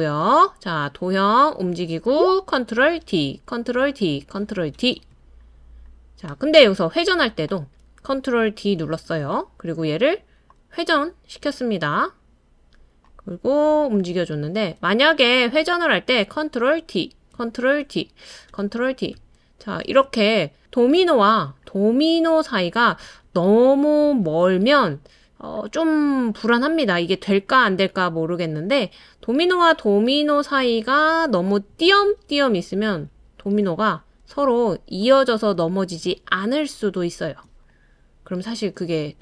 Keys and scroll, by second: 3.0 super+d, 3.7 super+d, 4.7 super+d, 8.9 super+d, 16.8 super+d, 17.8 super+d, 18.5 super+d, 19.1 super+d, 24.9 super+d, 25.8 super+d, 32.4 super+d, 32.8 super+d, 33.2 super+d, 36.3 super+d, 36.6 super+d, 37.1 super+d.